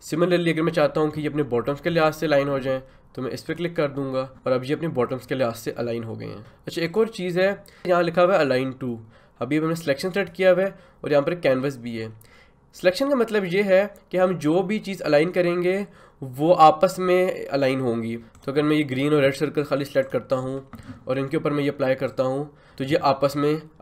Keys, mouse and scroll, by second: 3.5 click, 6.9 click, 10.1 click.